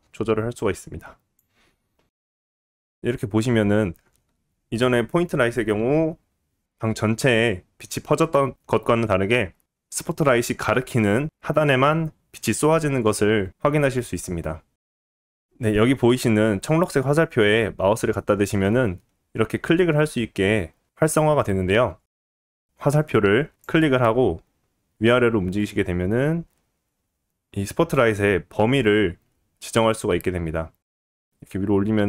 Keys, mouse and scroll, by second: 15.1 ctrl+z, 15.1-24.1 middle drag, 24.1-32.0 drag.